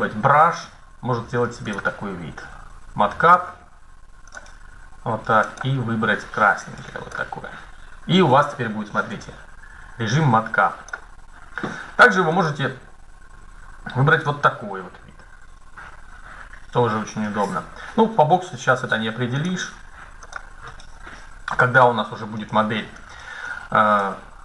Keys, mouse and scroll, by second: 1.4-3.2 drag, 4.0-7.0 drag, 8.0-10.8 middle drag, 12.0-14.1 drag, 19.1-21.0 drag, 21.0-23.2 middle drag, 21.2 KP_1, 23.6 middle click.